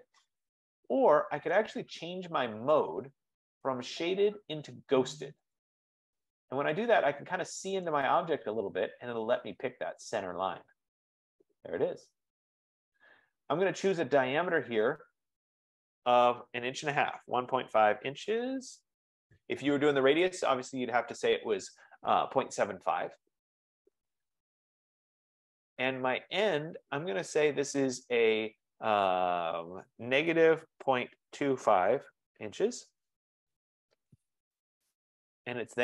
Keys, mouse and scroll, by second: 1.7 right click, 3.2 click, 5.7 right click, 7.9 right click, 11.2 click, 14.6 click, 17.0-19.2 typing, 20.3 Return, 20.3 ", 30.3-33.5 typing, 33.5 Return, 34.9 click, 35.7 scroll.